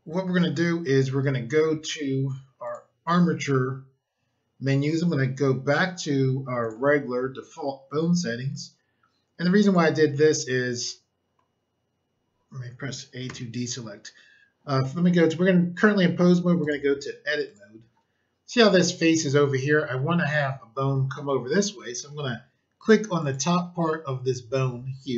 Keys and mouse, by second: 2.6 click, 6.5 click, 9.5 click, 13.2 a, 16.6 click, 17.4 click, 23.1 click.